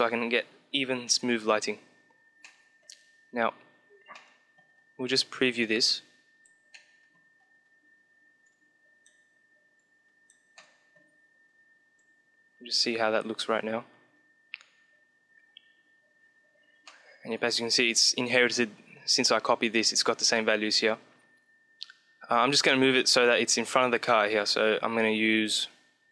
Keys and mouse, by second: 1.9-3.9 middle drag, 4.1-5.2 middle drag, 5.2-7.0 drag, 6.9-7.9 middle drag, 7.9-11.2 drag, 10.3-11.9 middle drag, 11.9-13.7 drag, 16.5-18.6 middle drag, 25.9-26.1 drag.